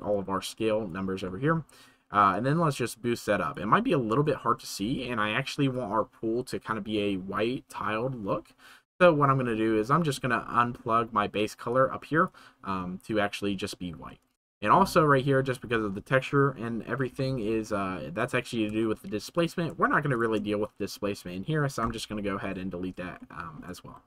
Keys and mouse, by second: 0.1 click, 0.3 click, 1.3 middle click, 2.4-3.5 drag, 4.2 shift+middle click, 9.0 middle click, 9.9 middle click, 10.6 middle click, 11.7 middle click, 11.9-12.2 middle drag, 17.6 shift+middle click, 18.8 shift+middle click, 19.3 click, 20.1 shift+right click, 23.2-23.5 shift+middle drag.